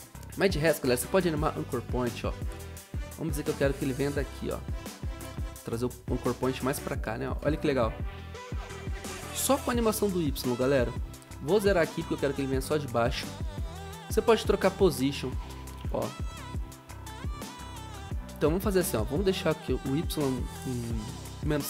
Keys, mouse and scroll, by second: 12.5 Return, 16.0 ctrl+z, 16.4 0.